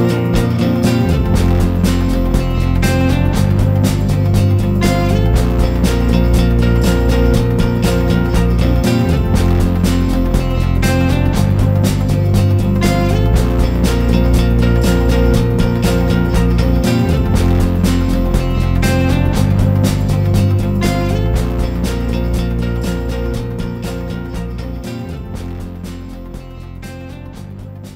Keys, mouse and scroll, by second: 0.6 Tab, 1.1 Tab, 1.2 click, 1.4 Tab, 1.7 g, 2.5 Tab, 2.7 Tab, 3.0 3, 3.1 click, 3.2 alt+click, 3.6 s, 4.4 Tab, 4.5 click, 4.8 Delete, 4.8 shift+a, 5.8 r, 6.7 click, 7.3 click, 7.4 Tab, 7.7 e, 8.7 click, 9.0 Tab, 9.2 s, 10.1 Tab, 10.3 a, 10.5 s, 11.1 s, 12.3 g, 16.0 s, 16.6 Tab, 17.0 Tab, 17.1 3, 17.3 click, 17.6 alt+shift+click, 17.7 alt+shift+click, 18.4 shift+d, 18.7 p, 19.2 middle click, 19.4 scroll up 1, 19.5 Tab, 19.8 click, 20.0 middle click, 20.2 Tab, 20.5 click, 20.8 Delete, 21.5 middle click, 22.0 a, 22.2 scroll up 2, 22.4 scroll down 1, 22.6 shift+middle click, 23.1 e, 24.6 middle click, 24.9 scroll up 1, 25.0 middle click, 25.4 2, 25.5 click, 26.0 shift+click, 26.3 g, 27.7 ctrl+KP_3.